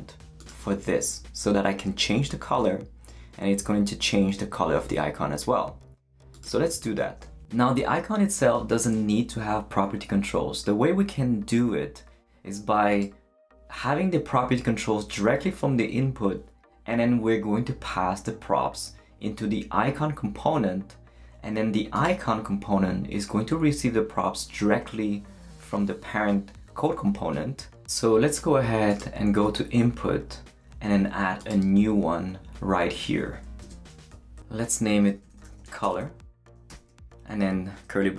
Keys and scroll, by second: 33.6 Return, 34.1 shift+super+Left, 34.7-36.7 typing.